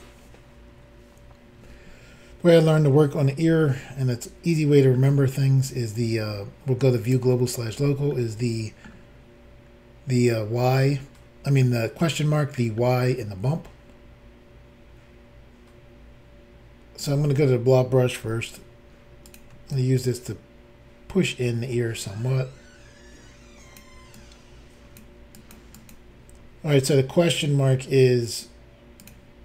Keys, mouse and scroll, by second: 3.7 shift+middle click, 7.1 click, 7.1 click, 8.1 shift+middle click, 10.2-10.9 scroll up 3, 11.7 middle click, 17.1 click, 18.3 f, 19.3 click, 19.7 ctrl+click, 24.1 ctrl+click, 25.3 ctrl+click, 25.5 ctrl+click, 25.7 ctrl+click, 25.9 ctrl+double click, 29.0 click.